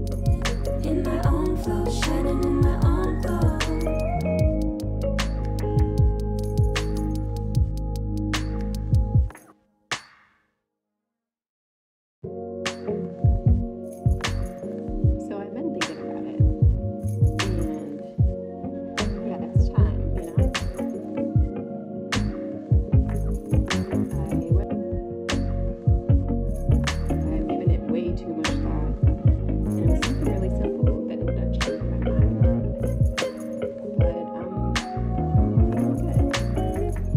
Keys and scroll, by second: 1.5 ctrl+z, 8.0 c, 8.1 ctrl+z, 17.1 ctrl+z.